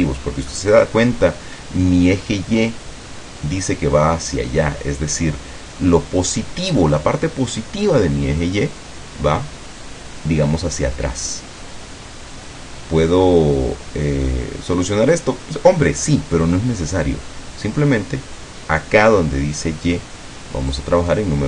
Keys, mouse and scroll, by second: 0.6 middle click, 1.1-1.5 scroll up 1, 20.8 click.